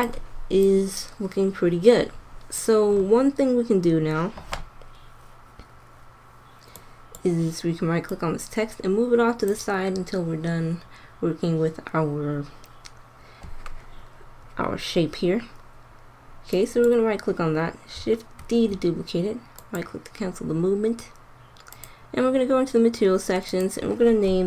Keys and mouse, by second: 1.7 click, 18.3 shift+d.